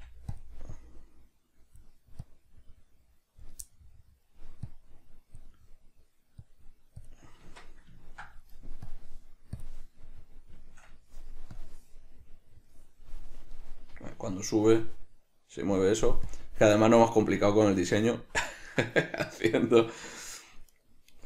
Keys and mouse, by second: 0.5 click, 3.8 middle click, 4.8 click, 5.7 middle click, 6.5 click, 8.1 ctrl+middle click, 9.0 click, 10.1-11.7 middle drag, 11.7 click, 12.1-16.4 middle drag, 16.4-17.6 drag, 18.4-20.8 middle drag, 20.8 right click.